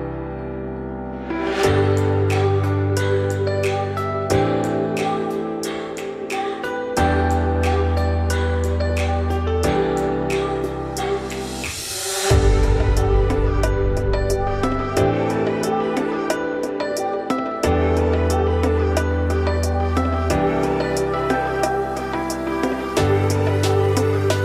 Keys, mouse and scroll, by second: 0.1 shift+middle drag, 0.3-0.9 scroll up 2, 0.9 z, 1.4 click, 2.9 ctrl+drag, 3.7 z, 4.6 alt+d, 7.1 scroll down 4, 7.2-7.7 middle drag, 7.7-8.3 scroll up 2, 8.5 scroll down 2, 8.7 middle click, 8.9-9.5 scroll up 2, 9.5 middle drag, 9.8-10.2 scroll up 1, 10.2 click, 10.6 shift+middle click, 11.5 shift+click, 11.8 shift+click, 12.1 shift+click, 12.4 shift+drag, 12.9 shift+click, 13.2 shift+click, 13.5 shift+click, 13.7 shift+click, 14.1 shift+click, 14.4 shift+click, 14.7 shift+click, 15.0 shift+click, 15.3 shift+click, 15.6 shift+click, 15.9 shift+click, 16.4 shift+click, 16.7 shift+click, 17.0 shift+click, 17.8-18.3 scroll down 2, 18.3-18.8 middle drag, 18.8 z, 19.2 click, 20.1-20.9 middle drag, 20.9 ctrl+click, 21.8 ctrl+drag, 22.2 scroll down 2, 22.3-23.2 middle drag, 23.2 z, 23.6 middle drag, 23.9-24.4 scroll up 2.